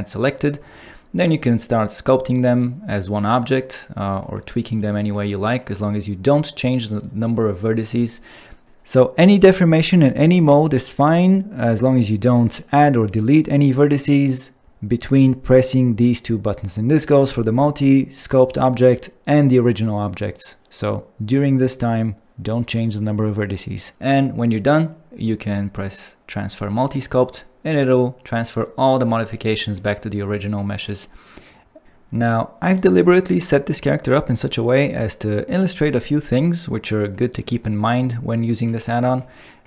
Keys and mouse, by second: 8.0 middle click.